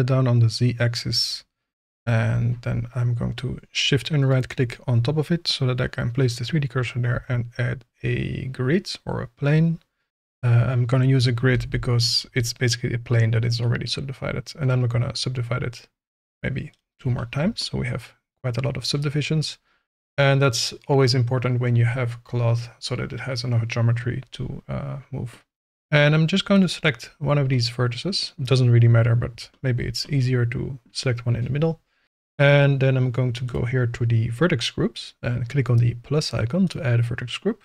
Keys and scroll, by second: 7.1 shift+a, 11.5 g, 11.6 z, 12.3 Tab.